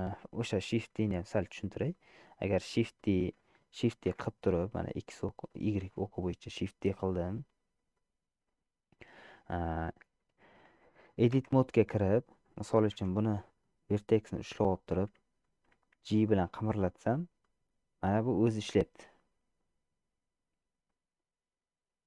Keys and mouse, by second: 0.0 middle click, 1.4 shift+middle click, 2.1 middle click, 3.1 shift+middle click, 4.4 shift+d, 9.4 shift+click, 11.6 Tab, 13.2 1, 13.7-14.9 drag, 16.1 g.